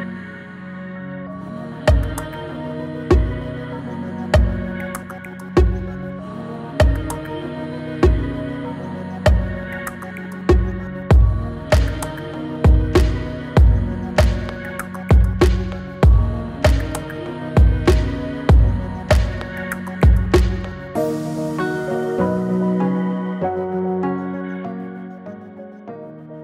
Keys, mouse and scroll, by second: 6.3-7.0 scroll down 2, 6.7 click, 7.0 click, 7.2 Return, 7.4 scroll up 1, 7.6-8.2 click, 8.8 scroll down 1, 8.9 click, 9.2 Return, 9.6 drag, 12.8 space, 15.1-16.0 drag, 18.5 space, 22.7 click, 22.9 space, 23.3-25.9 drag.